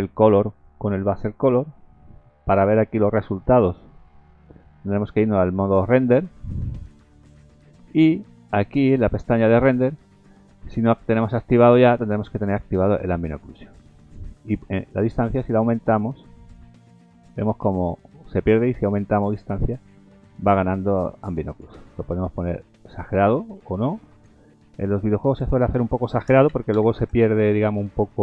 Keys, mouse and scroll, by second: 0.5 click, 2.9-3.5 scroll down 2, 4.7 z, 6.9-7.5 scroll up 3, 9.3 click, 11.2-12.2 scroll up 6, 14.7 click, 25.2 click.